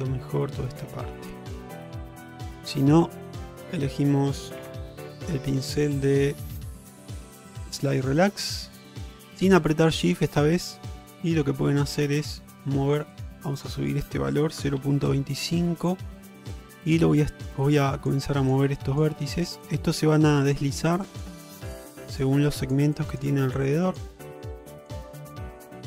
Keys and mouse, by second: 1.1 shift+middle drag, 2.8 ctrl+Tab, 4.7 q, 7.7 click, 10.3 click, 11.7 click, 13.2 click, 13.7-15.5 drag, 16.9 click, 17.8 click, 18.4 click, 18.8 click, 19.4 click, 19.7 click, 20.4 click, 21.1 click, 21.5 click, 22.0 click, 22.5 click, 23.0 click, 23.9 click, 24.3 click, 24.8 click, 25.2 click, 25.7 click.